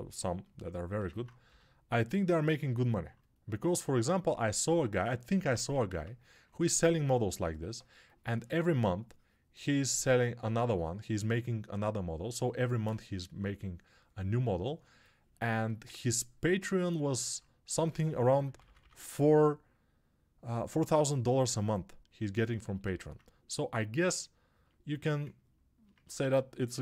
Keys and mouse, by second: 2.7 alt+g, 5.5 1, 6.5 2, 15.2-26.8 shift+drag, 18.1 [, 24.8 1.